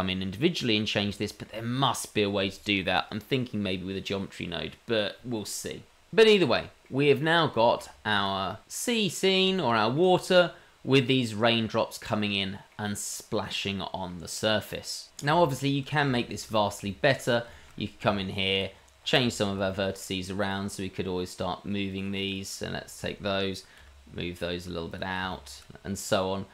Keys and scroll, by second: 7.2 h, 8.2 h, 17.8 Tab, 19.3 Tab, 23.5 g, 25.3 g, 26.2 g.